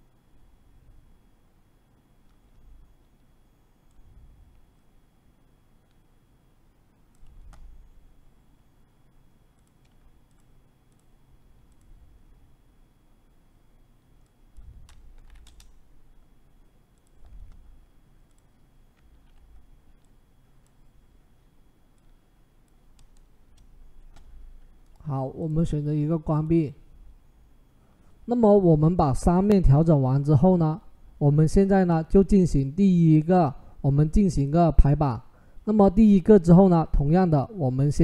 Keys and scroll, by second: 14.7-15.6 typing, 18.9 ctrl+t, 23.2 Return.